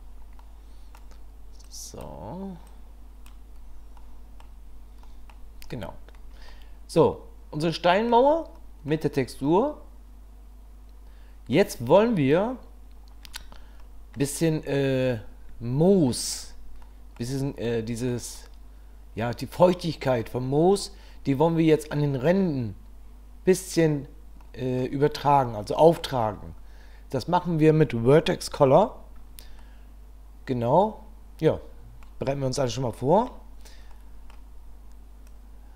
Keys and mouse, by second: 0.4 middle click, 1.6 click, 2.7 click, 4.0 middle click, 5.2 middle click, 6.5-8.1 middle drag, 8.6-8.9 middle drag, 9.4-11.5 middle drag, 13.8-14.2 middle drag, 16.8-17.2 middle drag, 17.7-18.1 middle drag, 18.3-20.2 middle drag, 24.4-24.8 drag, 25.6-26.0 drag, 29.6-31.6 middle drag, 31.6 click, 31.7 middle click, 31.8 click, 33.0 middle click, 34.0 middle click, 35.3 click.